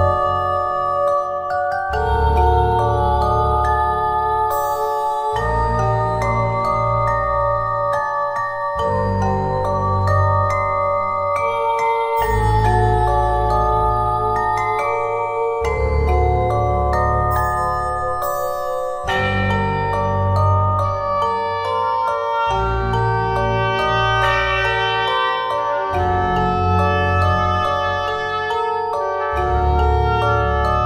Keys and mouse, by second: 0.5 KP_1, 1.9 ctrl+z, 2.1 ctrl+z, 3.3 e, 5.7 s, 7.9 click, 8.5 e, 10.4 r, 10.7 click, 11.7 e, 13.0 z, 13.8 r, 14.8 click, 15.3 KP_1, 18.4-20.0 middle drag, 19.1 ctrl+Tab, 20.6 c, 23.2 c, 27.4 c, 28.0 middle click, 28.5 c.